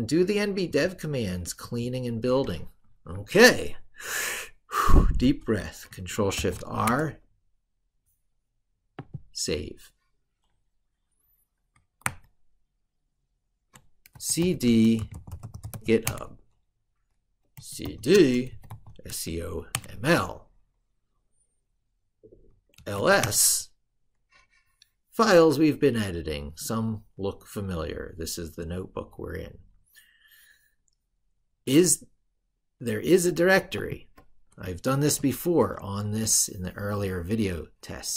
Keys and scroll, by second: 2.9 ctrl+super+Right, 6.1 ctrl+shift+r, 11.8 ctrl+super+Right.